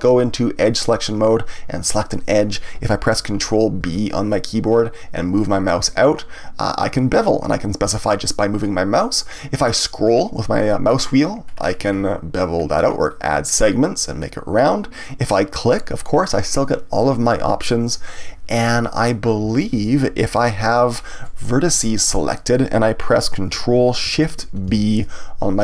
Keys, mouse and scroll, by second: 0.7 click, 1.8 click, 3.8 ctrl+b, 15.6 click, 19.4 ctrl+z, 22.0 click, 24.6 ctrl+shift+b.